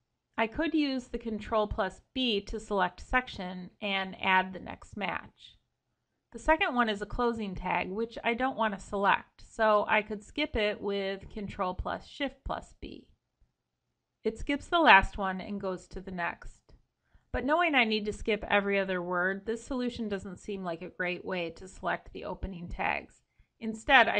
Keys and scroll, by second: 0.4 ctrl+b, 3.0 ctrl+b, 10.1 ctrl+shift+b.